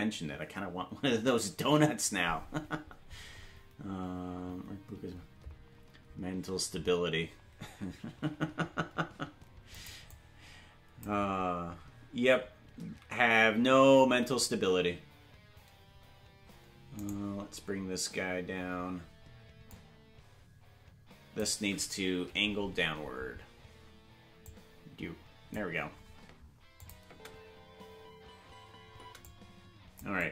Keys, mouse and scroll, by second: 9.7 click, 10.1 click, 19.7-21.4 drag, 19.7 right click, 22.2 Left, 24.4-25.6 drag, 26.8 click, 27.0 space, 29.2 click, 29.2 space, 30.2-30.3 drag.